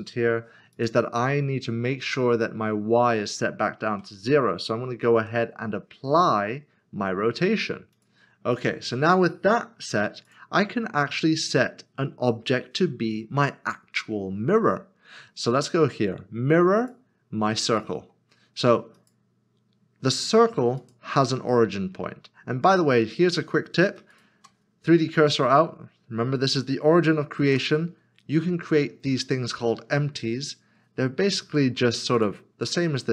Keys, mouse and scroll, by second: 0.7 click, 7.9 ctrl+a, 16.8 click, 23.9 click, 24.1 shift+right click, 27.4 a, 32.2 click.